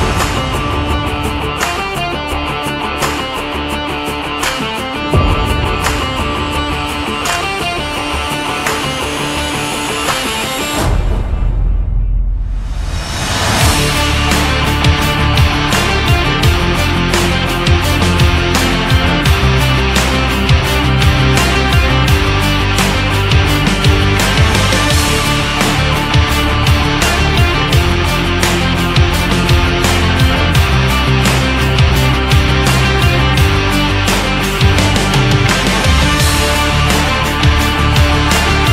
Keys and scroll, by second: 8.8 ctrl+z.